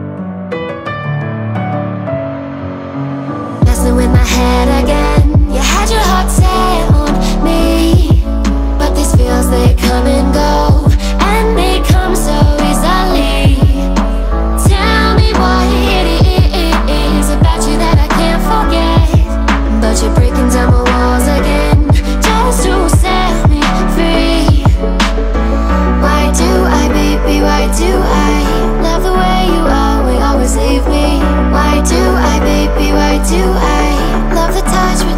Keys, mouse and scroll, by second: 6.6 x, 15.1 ctrl+a, 29.0 click, 33.4-35.1 drag.